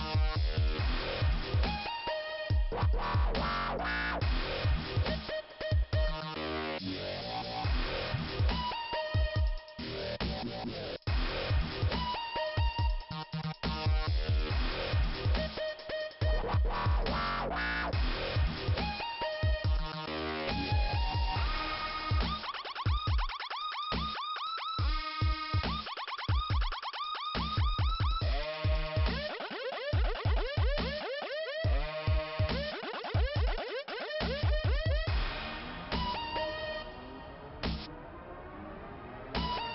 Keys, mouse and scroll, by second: 3.9 middle click, 5.4 scroll down 1, 6.3 click, 6.4 click, 8.2 scroll up 2, 13.5-13.9 scroll up 3, 15.6-16.0 scroll down 1, 17.1 middle click, 18.3-19.0 scroll up 2, 21.8 scroll down 2, 25.4-25.9 scroll down 1, 27.3 middle click, 28.0-28.3 scroll down 1, 29.4 middle click, 31.0 scroll up 2, 32.3 click, 32.4 click, 34.8 scroll down 2, 37.1 scroll down 2.